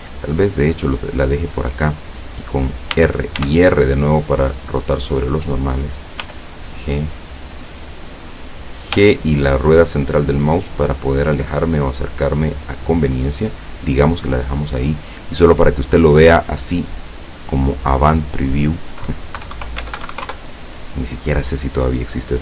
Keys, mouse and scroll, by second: 1.7 click, 3.0 r, 5.7 click, 6.3 g, 8.1 click, 9.0 g, 10.0 middle click, 13.2 click, 15.7 click, 17.0-17.8 scroll down 4, 18.3 click, 19.5 KP_1, 19.6 KP_0, 19.9 Tab, 20.1 KP_1, 20.2 KP_0, 20.3 KP_Enter.